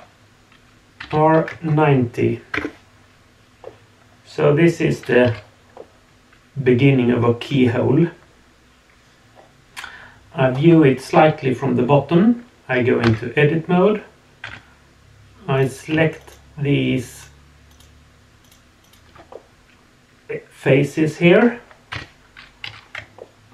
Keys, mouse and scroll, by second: 3.6-4.9 middle drag, 5.2 z, 5.7-9.9 middle drag, 9.9 click, 10.7-13.0 scroll up 2, 13.0 Tab, 14.4 3, 15.5 click, 16.2 shift+click, 17.1 shift+click, 17.7 shift+click, 18.4 shift+click, 18.8 shift+click, 19.3-21.3 middle drag, 21.9 KP_1, 22.6 z, 23.2-23.5 shift+middle drag.